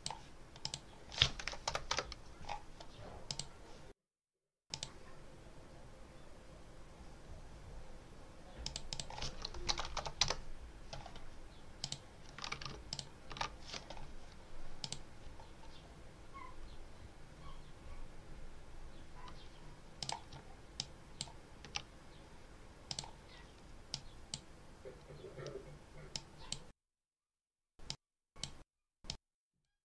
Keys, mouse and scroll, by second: 0.5 click, 1.3 2, 1.8 Return, 3.1 click, 4.6 click, 8.5 click, 9.3-10.2 typing, 11.7 click, 12.8 ctrl+alt+click, 14.7 click, 19.9 click, 20.7 ctrl+click, 22.7 click, 23.8 click, 26.0 click, 27.7 click, 28.9 click.